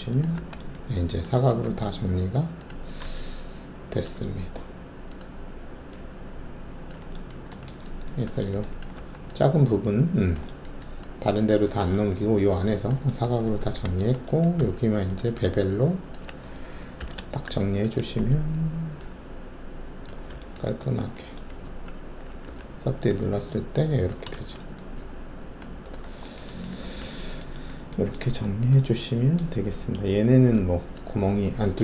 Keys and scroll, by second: 0.4 alt+q, 1.6 alt+1, 8.9 alt+`, 13.7 w, 14.5 alt+2, 16.9 alt+shift+b, 21.6 alt+`, 22.4 3, 24.3 alt+shift+a, 26.8 alt+1.